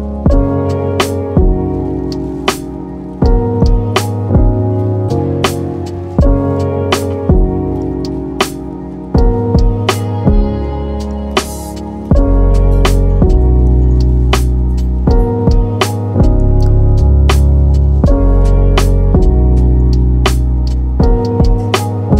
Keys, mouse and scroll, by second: 0.9 s, 3.0 middle click, 3.4 Tab, 4.9 ctrl+2, 5.9-6.2 scroll down 2, 6.2-9.0 middle drag, 9.0 s, 11.2-13.0 middle drag, 13.0-13.3 scroll up 2, 13.3 middle click, 13.7 scroll up 1, 13.9 Tab, 14.9 click, 16.7 ctrl+r, 19.9-22.0 middle drag, 22.0 Tab.